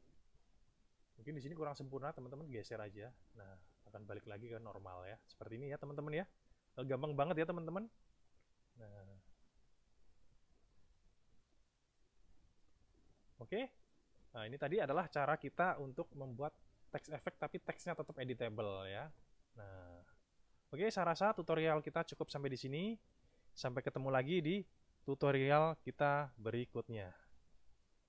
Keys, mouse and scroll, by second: 0.8 click, 2.2 click, 2.8 click, 8.8 click, 9.8 click, 10.9-12.3 middle drag, 13.4 click, 27.5 ctrl+shift+KP_1.